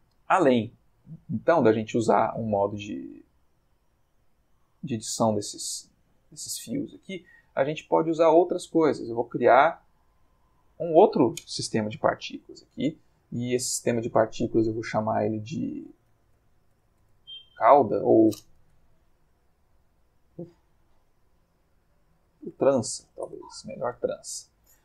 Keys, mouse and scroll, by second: 0.1-1.7 ctrl+middle drag, 3.8 click, 5.6-6.5 ctrl+middle drag, 8.8-9.3 drag, 10.1 click, 15.8-16.8 typing, 16.9 shift+Return, 19.6 click, 22.3-23.0 typing, 23.2 shift+Return.